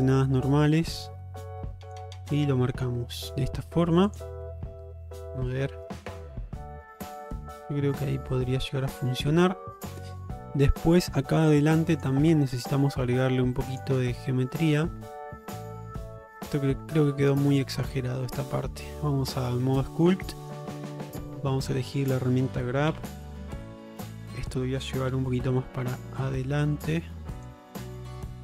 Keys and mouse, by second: 0.6-2.0 drag, 2.2-3.3 middle drag, 4.2 click, 4.7 Tab, 5.5-9.4 middle drag, 9.8 middle drag, 10.4 middle click, 11.0 shift+middle drag, 11.4 alt+middle click, 12.0 click, 12.3 Tab, 13.8 click, 14.2-17.9 middle drag, 18.2-18.5 middle drag, 19.0 ctrl+Tab, 20.2 middle click, 23.0 q, 24.1 middle click, 25.2 f, 27.8 middle click.